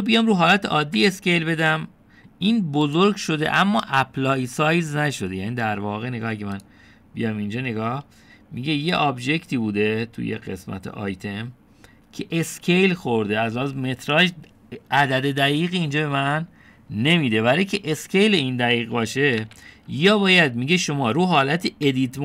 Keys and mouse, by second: 2.0 s, 7.6 click, 20.5 ctrl+z.